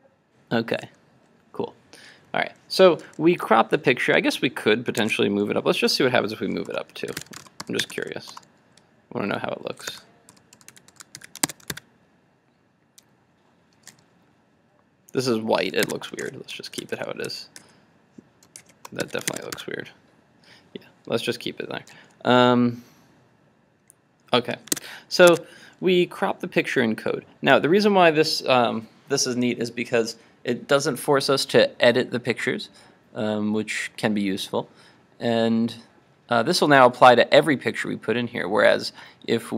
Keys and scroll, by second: 5.0 super+Tab, 11.2 super+s, 11.6 super+Tab, 11.7 super+r, 15.9 super+Tab, 16.2 super+z, 17.6 super+z, 18.7 shift+super+z, 19.1 super+s, 19.7 super+r, 24.8 super+Tab.